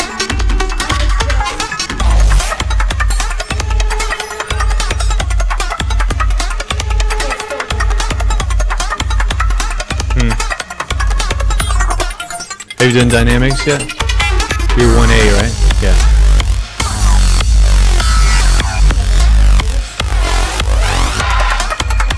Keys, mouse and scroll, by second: 6.3-7.6 alt+drag, 11.2 click, 21.5 click, 22.1 click.